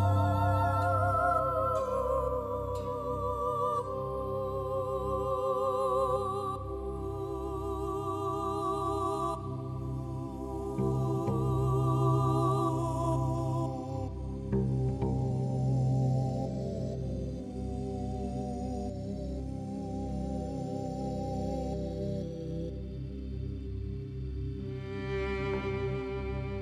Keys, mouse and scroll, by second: 1.4-2.5 drag, 3.3-6.4 drag, 4.3 g, 11.0 ctrl+r, 13.5-14.8 drag, 16.3-20.2 drag, 17.6 x, 21.4-26.4 drag.